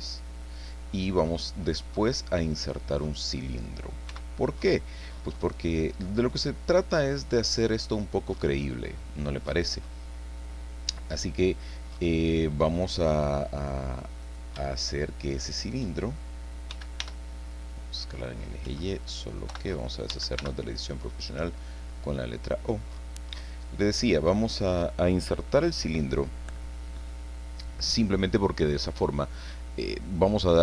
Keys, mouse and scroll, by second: 1.8 scroll down 1, 2.0-3.8 middle drag, 4.1 x, 5.4 click, 6.1-8.1 middle drag, 8.0-8.6 scroll up 1, 8.4 middle click, 12.7 click, 14.2 right click, 15.4 shift+right click, 16.7 s, 17.0 y, 18.6 Escape, 19.5 o, 20.1 s, 20.4 y, 23.3 click, 23.7 click, 28.3-30.2 drag, 30.2 scroll up 1, 30.4 middle click.